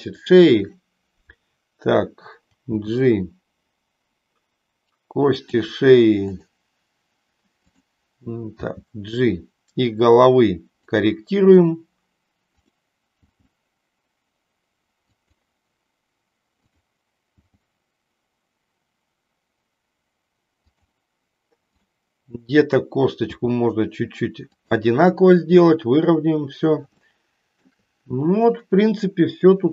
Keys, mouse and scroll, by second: 0.2 click, 2.6 g, 6.4 click, 7.6 click, 8.6 g, 13.6 g, 16.6-17.6 drag, 17.6 g, 20.7 click, 21.7-22.8 drag, 23.2 g, 27.1 shift+middle click.